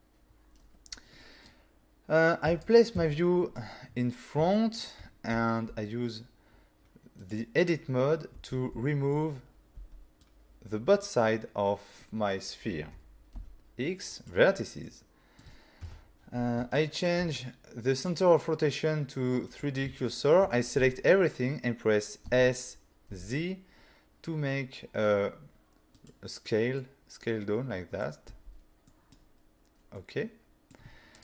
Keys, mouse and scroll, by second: 2.4 1, 3.0 5, 3.9 scroll up 4, 4.5 shift+scroll up 1, 4.5 shift+middle click, 5.1 scroll up 1, 5.3 z, 6.3 scroll down 1, 7.2 click, 8.5 alt+a, 9.8 b, 10.2 click, 13.3 x, 14.1 click, 14.8 middle click, 16.7 shift+middle click, 18.0 click, 19.9 click, 20.0 shift+middle click, 20.8 a, 22.3 s, 23.1 z, 25.9 click, 26.8 middle click, 28.3 z, 28.9 middle click, 30.0 middle click.